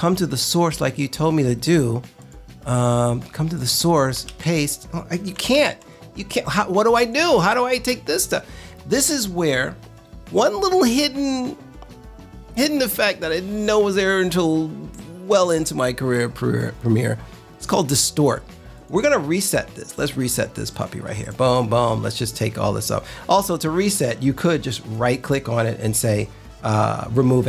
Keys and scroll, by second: 4.2 super+v, 5.5 super+v.